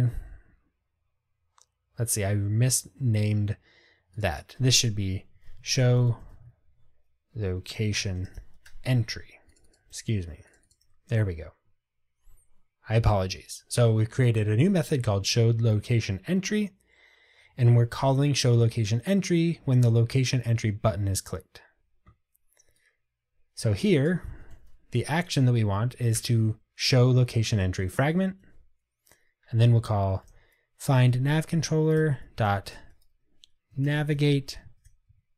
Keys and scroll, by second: 10.0 super+c, 10.9 super+v, 26.3 Return, 31.2 Return.